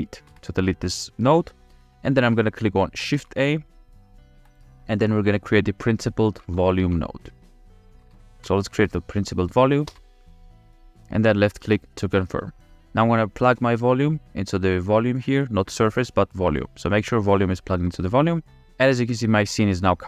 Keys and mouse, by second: 0.6 Delete, 3.1 shift+a, 14.1-17.0 drag.